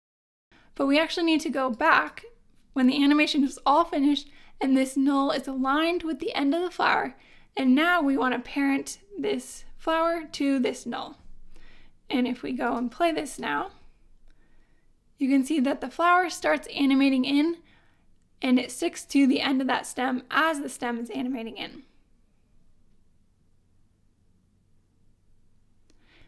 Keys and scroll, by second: 13.7 space.